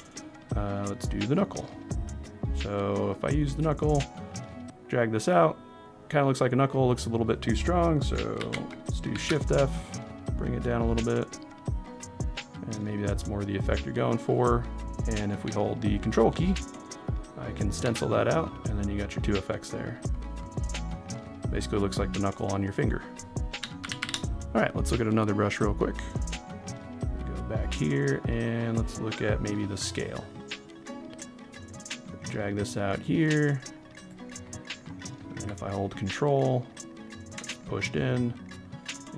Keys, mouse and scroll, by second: 4.0 click, 8.5 ctrl+z, 9.1 shift+f, 10.3 click, 10.9 click, 16.0 ctrl+click, 23.8 ctrl+z, 24.2 ctrl+z, 25.9 click, 31.9 click, 34.4 middle click, 35.9 ctrl+click.